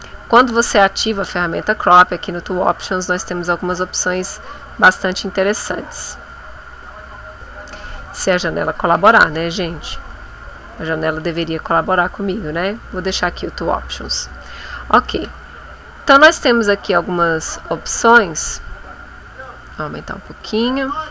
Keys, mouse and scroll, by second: 1.4 click, 2.1-3.8 drag, 4.9-6.0 drag, 8.1-9.4 drag, 10.1-11.1 drag, 12.7 click, 16.8-18.5 drag, 19.5-20.6 drag.